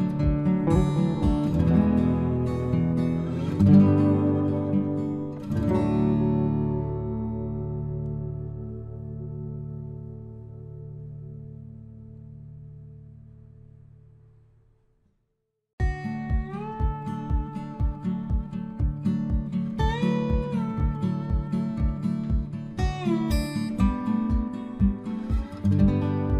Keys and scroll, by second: 5.3 Return, 11.0 Return.